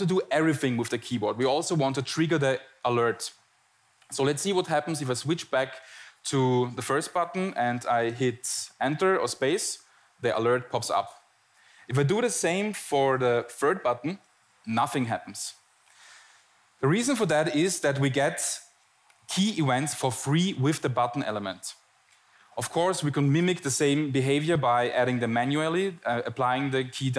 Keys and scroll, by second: 5.1 shift+Tab, 6.9 shift+Tab, 6.9 Return, 8.7 Return, 9.6 space, 11.1 space, 11.6 Return, 12.1 Tab, 13.8 Tab, 13.8 Return, 15.7 Return, 15.8 space, 17.4 space.